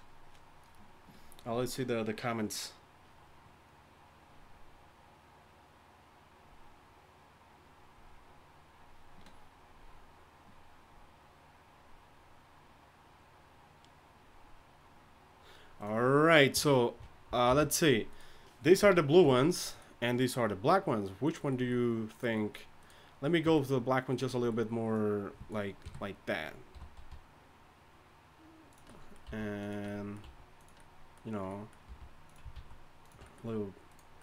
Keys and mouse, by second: 16.5 KP_3, 17.5 alt+h, 18.8 z, 19.2 z, 23.4 Tab, 25.8 KP_3, 27.0 g, 29.2 s, 30.2 s, 31.8 g, 32.5 alt+s, 33.8 click.